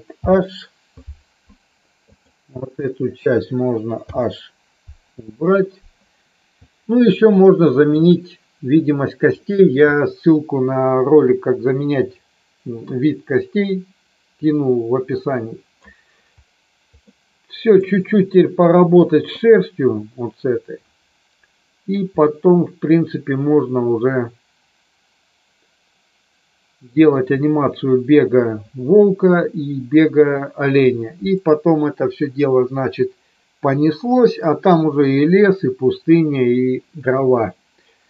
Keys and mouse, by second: 0.2 alt+h, 2.1 click, 4.0 h, 7.4 shift+middle click, 17.0 middle click, 22.2-26.9 middle drag.